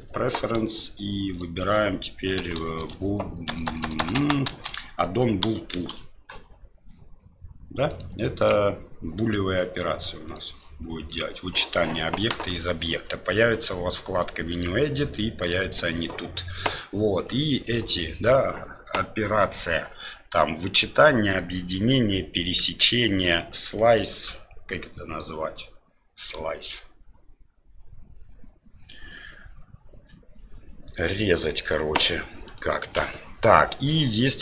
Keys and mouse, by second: 15.5 click, 17.3-18.0 middle drag.